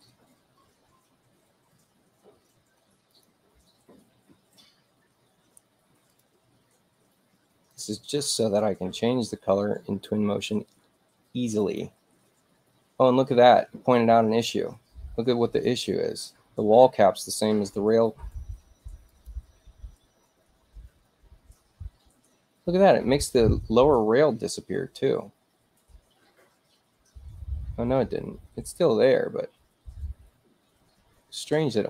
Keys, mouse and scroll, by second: 3.1 click, 6.1 click, 7.7 click, 11.6 click, 19.1 click.